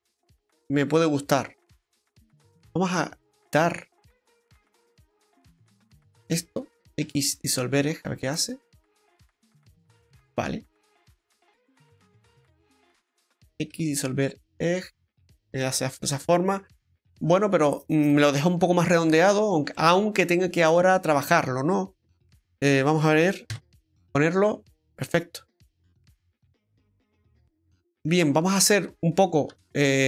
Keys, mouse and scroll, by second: 2.6 alt+shift+Tab, 2.6 middle click, 2.6 alt+shift+right click, 3.3 middle click, 6.1 alt+shift+right click, 7.0 x, 8.8 middle click, 12.9 alt+shift+right click, 13.7 x, 14.6 middle click, 16.2 ctrl+z, 16.7 middle click, 18.6 Tab, 19.7 middle click, 23.5 KP_Divide, 24.6-24.9 scroll down 2, 24.9 middle click, 28.3 scroll up 2, 29.5 Tab, 29.5-30.0 scroll up 1.